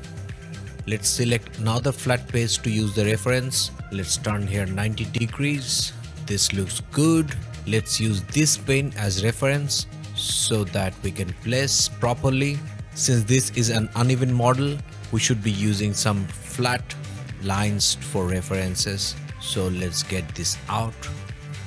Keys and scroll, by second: 0.2 q, 0.4 q, 0.6 o, 4.3-5.9 typing, 7.4 m, 12.5 o, 14.7 ,, 15.0 m.